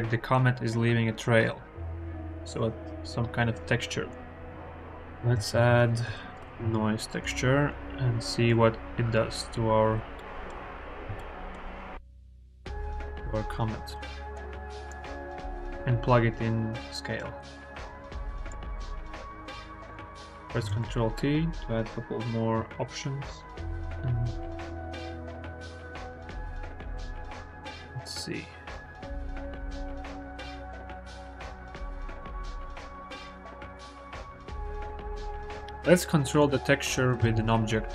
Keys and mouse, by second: 5.2 shift+a, 8.3 click, 10.0 click, 10.9-12.1 shift+middle drag, 12.2-13.3 middle drag, 14.2 middle click, 15.1 middle click, 17.6 middle click, 20.6 ctrl+t, 27.5-32.4 drag, 33.4 click, 33.8-34.2 shift+middle drag, 34.7 KP_1, 36.1 shift+drag, 37.0 shift+a.